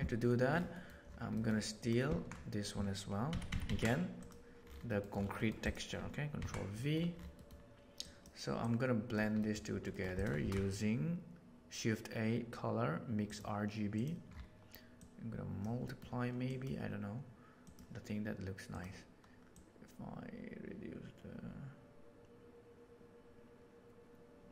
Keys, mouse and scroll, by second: 0.7 middle click, 3.2 ctrl+c, 3.4 ctrl+c, 3.6 ctrl+c, 4.8 middle click, 5.3 middle click, 6.3 ctrl+v, 6.7 middle click, 7.3 middle click, 7.9 click, 8.5 click, 9.4 middle click, 9.9 middle click, 10.1 click, 10.4 shift+a, 14.9-15.5 drag, 15.8 middle click, 16.4 click, 17.6 click, 19.4-21.0 drag.